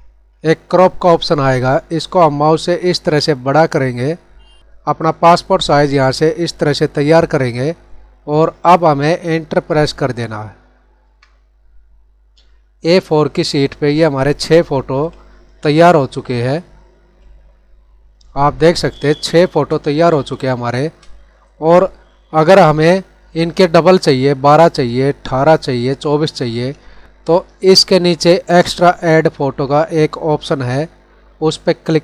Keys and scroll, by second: 6.9 Down, 7.6 Right, 15.7 Left, 18.5 ctrl+=, 18.9 space, 19.8 ctrl+=, 20.3 space.